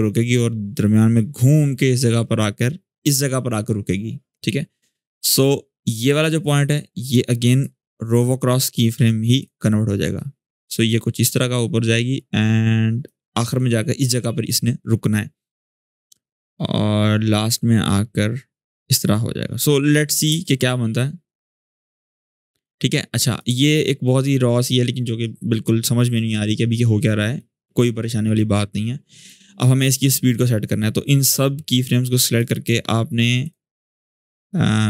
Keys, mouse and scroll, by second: 5.9 click, 7.2 right click, 9.1-13.0 drag, 15.8-20.1 drag, 20.0 space, 22.3-23.3 drag, 23.8-24.4 shift+scroll up 1, 27.1-29.3 drag.